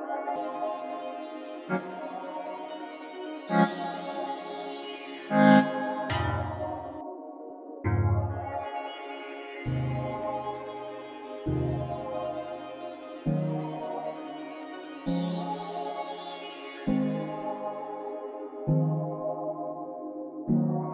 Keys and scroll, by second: 0.3 d, 1.1 ctrl+a, 12.6 ctrl+Up.